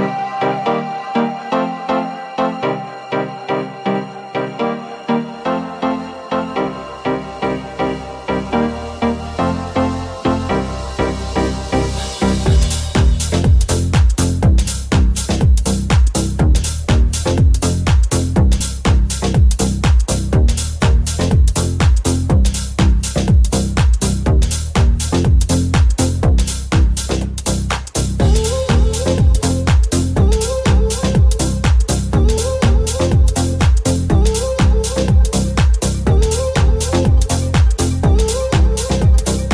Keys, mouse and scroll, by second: 0.5 middle click, 0.8 middle click, 1.0-8.5 middle drag, 7.3 alt+z, 8.5-10.0 alt+drag, 8.6 alt+z, 9.3 g, 10.0 alt+middle click, 10.2 alt+z, 10.9-12.1 alt+drag, 11.0 alt+z, 11.2 g, 12.1-13.8 middle drag, 13.8 right click, 13.9 middle click, 14.1 right click, 14.3-18.5 middle drag, 17.1 click, 17.4 g, 18.5 shift+click, 18.5-20.8 shift+middle drag, 18.6 g, 20.8 right click, 20.8-25.2 middle drag, 25.2 right click, 25.3 shift+middle click, 25.6 shift+right click, 25.6 shift+middle click, 26.0 shift+right click, 26.0 shift+middle click, 26.3-31.1 shift+middle drag, 29.9 alt+z, 31.1 click, 31.1 s, 31.8-33.6 alt+middle drag, 31.8 alt+z, 33.4 alt+3, 33.6 right click, 33.7 alt+shift+middle click, 33.8 right click, 33.9-39.5 alt+middle drag, 34.0 alt+z, 34.5 alt+z, 36.1 w.